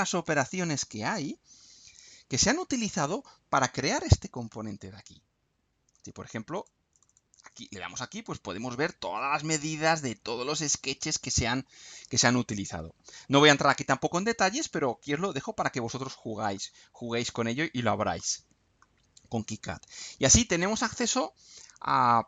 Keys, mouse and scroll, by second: 1.3-1.7 scroll down 1, 2.6-3.0 scroll up 1, 5.2 scroll up 1, 6.5 click, 8.1-8.9 scroll up 3, 9.8 scroll down 2, 10.6-12.3 middle drag, 12.6-13.0 scroll down 2, 14.0 click, 15.8-16.2 scroll down 2, 16.5-17.7 middle drag, 18.2 middle click.